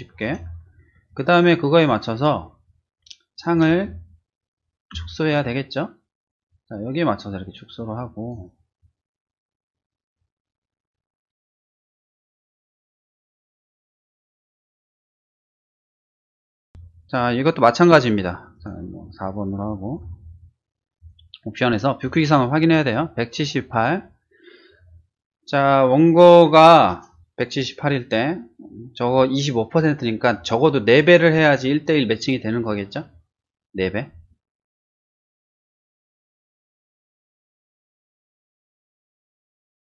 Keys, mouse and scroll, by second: 3.3 click, 4.9 ctrl+shift+z, 6.4-6.9 drag, 15.6 ctrl+shift+z, 18.5 click, 19.6 click, 20.0 4, 21.0 click, 22.0 click, 35.1 click, 35.4 click, 35.6 click, 35.9-36.8 typing, 36.8 Return, 37.5 click, 38.5 click, 38.9 click, 39.1 click, 39.4-39.9 typing.